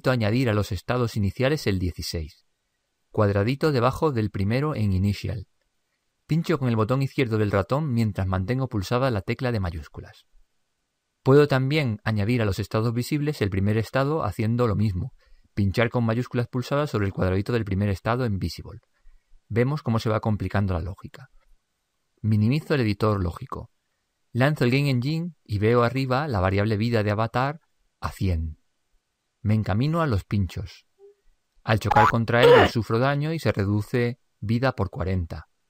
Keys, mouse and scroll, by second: 23.1 ctrl+Up, 24.9 p.